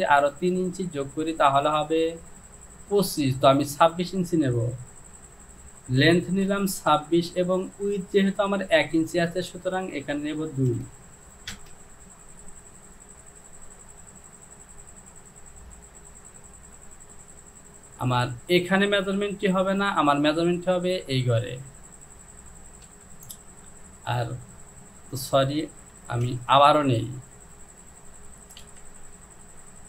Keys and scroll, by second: 5.2 Down, 6.5 KP_2, 7.0 KP_6, 7.3 Down, 11.5 Return, 23.0 KP_2, 26.3 ctrl+z, 28.6 Down, 29.5 Down.